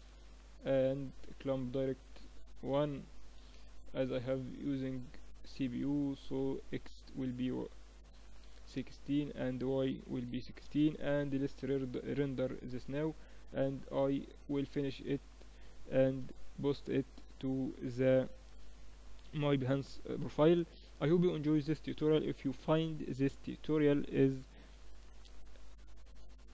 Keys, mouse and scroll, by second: 0.0-8.4 drag, 8.7-11.0 drag, 11.0 ctrl+s, 13.3-15.1 drag, 15.1 middle click.